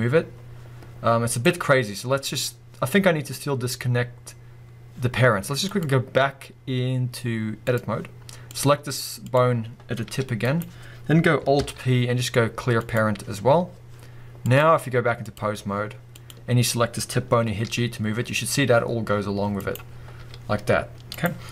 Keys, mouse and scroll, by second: 1.4 right click, 3.0 scroll up 1, 5.7-8.6 drag, 9.2 click, 10.1 g, 10.6 right click, 11.6 alt+p, 14.4-16.3 drag, 17.6 g, 19.7 right click, 19.9-20.2 scroll down 1, 20.2 g, 21.2 right click.